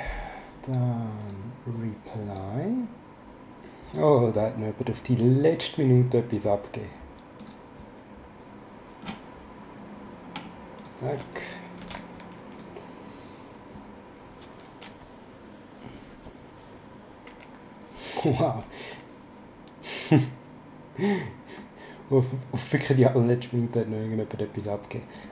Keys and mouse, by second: 1.2 click, 7.4 click, 10.8 click, 11.8 v, 12.5 click, 24.6 click.